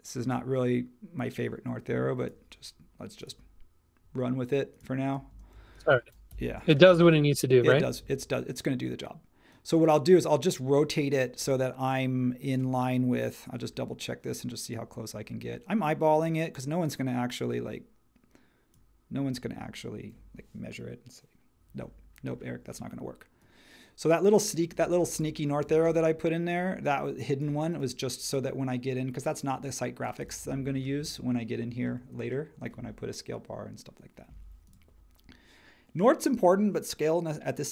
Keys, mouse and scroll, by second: 5.3 space, 6.3 BackSpace, 24.7 space.